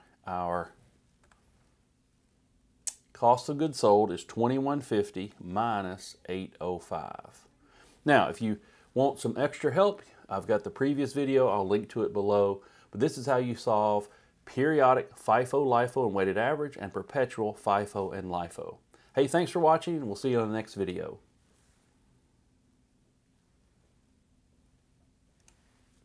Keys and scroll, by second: 8.3 Return.